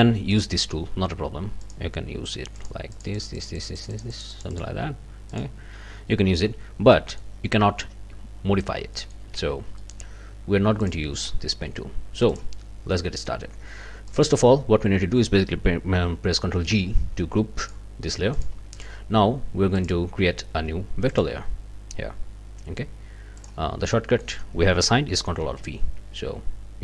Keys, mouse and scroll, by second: 0.3 click, 1.6 click, 2.6 click, 2.9-4.8 drag, 5.3 click, 6.9 middle click, 8.9 ctrl+middle click, 9.4 ctrl+z, 9.8 ctrl+click, 10.8 click, 12.3 click, 12.9 click, 14.1 click, 16.7 ctrl+g, 17.6 click, 18.3 click, 18.7 click, 19.8 click, 21.1 click, 23.4 click, 23.9 middle click, 24.1 click, 25.4 ctrl+alt+v.